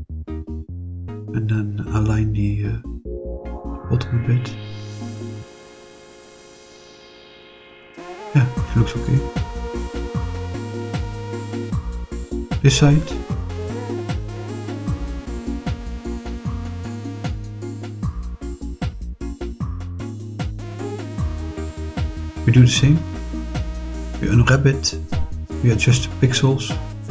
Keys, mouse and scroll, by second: 0.5 click, 2.4 click, 7.0 click, 7.9-9.3 middle drag, 9.3-9.8 scroll up 4, 10.1-11.7 middle drag, 11.8-12.4 scroll down 4, 12.4-13.3 middle drag, 14.8 click, 15.4 click, 16.0-16.6 scroll down 2, 16.6 click, 18.9 click, 19.5 click, 20.6 click, 22.7 click, 23.3-25.3 drag, 26.7 click.